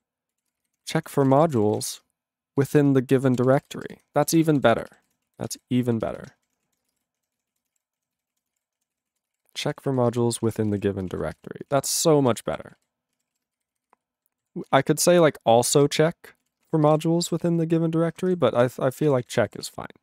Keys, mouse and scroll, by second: 0.0-4.1 typing, 4.5 ctrl+space, 4.6 ctrl+b, 4.7 ctrl+b, 4.9 ctrl+b, 5.1 ctrl+w, 5.3 ctrl+a, 5.4 ctrl+space, 5.5 ctrl+e, 5.5 ctrl+g, 5.9 ctrl+b, 6.1 ctrl+b, 6.2 ctrl+b, 6.5 ., 6.8 ctrl+space, 6.9 ctrl+e, 7.0 ctrl+g, 7.5 ctrl+s, 7.5 ctrl+a, 7.6 ctrl+space, 7.7 ctrl+e, 7.8 ctrl+g, 8.2 ctrl+s, 8.3 ctrl+a, 8.4 ctrl+space, 8.5 ctrl+e, 8.6 ctrl+g, 9.0 ctrl+s, 9.1 ctrl+a, 9.3 ctrl+space, 9.3 ctrl+g, 9.7 ctrl+s, 9.9 ctrl+a, 10.0 ctrl+space, 10.1 ctrl+e, 10.1 ctrl+g, 10.4 ctrl+space, 10.4 ctrl+a, 10.5 ctrl+p, 10.7 ctrl+g, 10.7 ctrl+e, 10.8 ctrl+n, 11.0 ctrl+space, 11.1 ctrl+a, 11.4 ctrl+g, 11.4 ctrl+e, 11.7 ctrl+space, 11.8 ctrl+a, 12.7 ctrl+s, 12.8 ctrl+g, 13.3 ctrl+s, 13.7 alt+f, 13.7 alt+f, 13.9 alt+f, 14.2 alt+b, 14.4 alt+b, 14.6-16.0 typing, 15.9 ctrl+d, 16.4 ctrl+e, 16.6 ctrl+space, 16.7 ctrl+a, 16.9 ctrl+g, 16.9 ctrl+e, 17.5 ctrl+s, 17.6 ctrl+a, 18.3 ctrl+/, 18.6 ctrl+/, 19.2 ctrl+s, 19.2 ctrl+a, 19.3 ctrl+n, 19.6 ctrl+s, 19.7-20.0 ctrl+n.